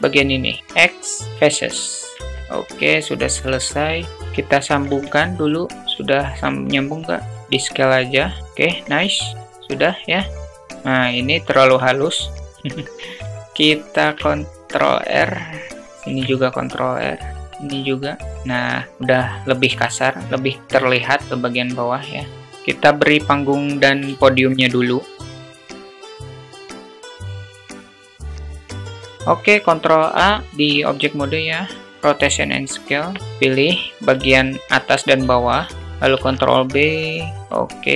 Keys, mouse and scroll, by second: 0.2 x, 1.6 Tab, 2.7 `, 4.1 /, 4.3 `, 5.4 click, 5.7 alt+shift+middle click, 7.2 s, 8.9-9.9 alt+middle drag, 10.7 click, 11.2 Tab, 13.5 ctrl+r, 17.3 ctrl+r, 17.9 Tab, 18.3 alt+middle click, 18.9 `, 19.3 click, 20.1-20.7 middle drag, 22.3 click, 23.7 alt+shift+middle click, 24.5 click, 25.1-26.8 typing, 25.6 alt+middle click, 25.7 Tab, 26.2 ctrl+b, 26.4 Tab, 27.4 click, 27.7 click, 27.9 click, 28.1 s, 28.3 click, 28.6 alt+shift+middle click, 28.8 Tab, 29.1 ctrl+alt+z, 29.4 ctrl+a, 32.5 Tab, 33.2 alt+z, 35.0 alt+z, 35.8 ctrl+b, 37.3 Tab.